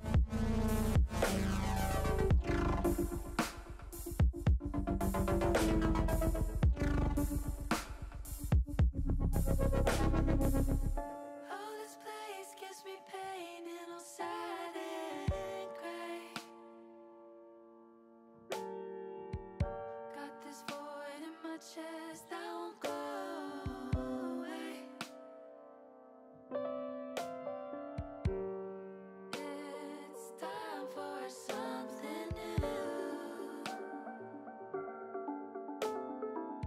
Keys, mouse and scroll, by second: 0.0 middle click, 0.6 middle click, 1.5 middle click, 4.2 shift+middle click, 5.3 s, 6.4 click, 7.9 s, 8.8 click, 9.2 ctrl+z, 10.2 s, 12.2 z, 14.8 click, 16.0 s, 19.7 click, 21.0 KP_1, 23.7 shift+middle click, 25.3 ctrl+r, 26.9 click, 28.2 middle click, 31.0 KP_1, 34.0 click, 35.6 e.